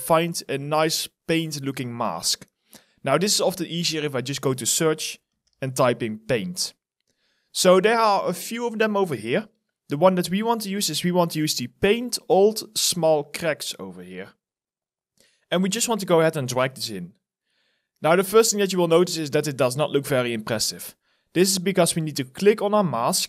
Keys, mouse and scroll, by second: 5.3-6.2 typing.